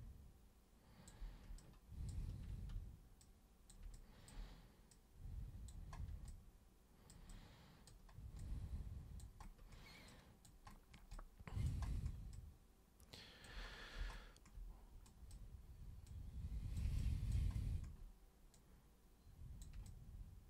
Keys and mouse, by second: 1.6-2.1 ctrl+super+drag, 3.2 super+click, 3.9 alt+super+click, 4.9 super+click, 6.3 alt+super+click, 7.3 alt+super+click, 8.4 alt+super+click, 10.1 alt+super+click, 11.1 alt+super+click, 12.4-13.4 alt+super+drag, 15.1 super+drag, 16.1-16.8 super+drag, 17.0 alt+super+click, 18.5-19.6 super+drag, 19.9 alt+super+click.